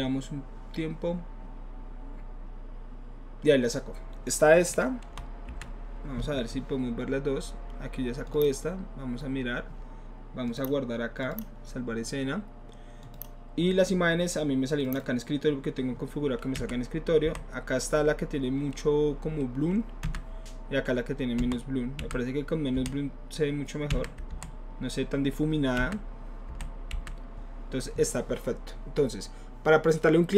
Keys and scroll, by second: 5.1 Left, 5.5 Right, 17.2 Left, 20.1 Right, 21.4 Left, 22.0 Right, 23.9 Right, 24.3 Left, 26.5 Left, 26.9 Right.